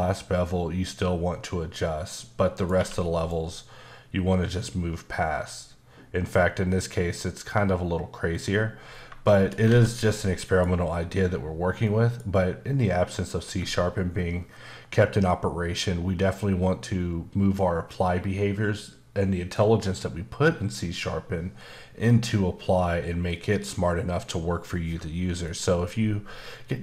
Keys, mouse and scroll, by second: 2.0 click, 2.6 click, 2.7 q, 3.1 click, 8.3 click, 8.9 scroll down 1, 9.2 shift+middle click, 9.9 scroll down 2, 10.2 middle click, 11.8 middle click.